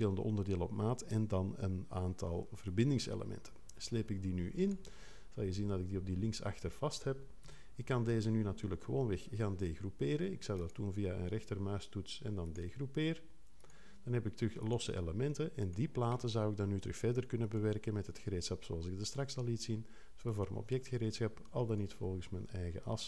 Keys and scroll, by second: 7.4 3.